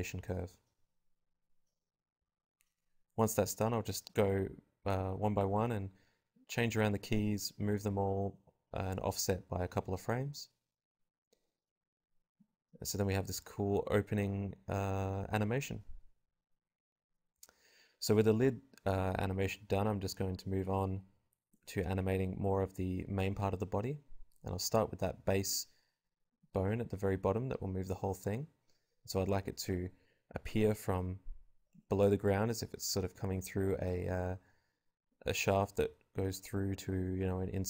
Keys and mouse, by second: 0.9 a, 1.3 a, 1.3 g, 1.5 click, 2.3 right click, 2.4 l, 2.5 g, 2.9-4.2 drag, 4.4 right click, 4.7 b, 5.0 g, 5.3 click, 6.4 alt+a, 9.6 alt+a, 11.0 click, 11.1 g, 12.1 Tab, 13.6 click, 14.0 ctrl+p, 14.7 click, 15.1 Tab, 15.2-16.6 drag, 15.3 g, 17.4-20.1 drag, 20.3 click, 20.6 KP_0, 21.0 g, 23.8 z, 25.2 KP_0, 25.4 z, 27.9 g, 29.5-31.1 drag, 29.5 i, 31.9-33.0 drag, 33.6 KP_0, 33.9 g.